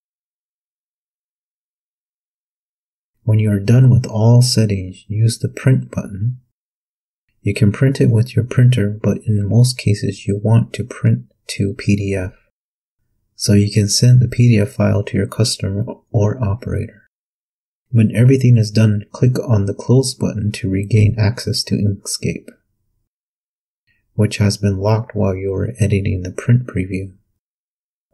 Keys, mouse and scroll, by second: 0.0-0.5 typing, 1.1 click, 4.7 click, 18.4 click, 22.7 click.